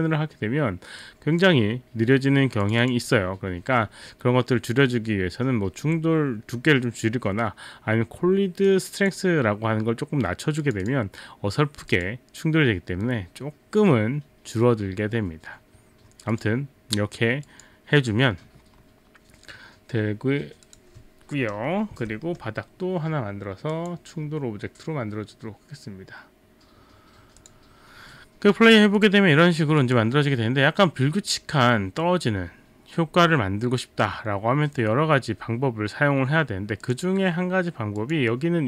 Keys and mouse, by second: 1.0 click, 2.6 click, 2.9 click, 8.7 click, 10.6 click, 10.8 click, 11.9 click, 16.3 click, 17.5 click, 20.7 click, 22.0 r, 22.2 middle click, 23.8 click, 27.4 click, 29.0 click, 29.8 click, 36.9 click, 38.0 click.